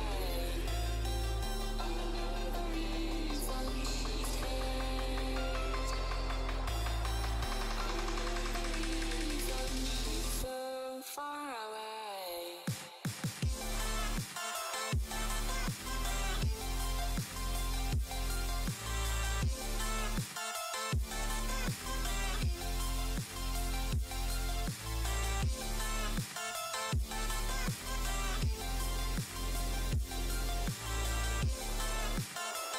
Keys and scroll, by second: 2.1 4, 2.5 5, 4.9 space.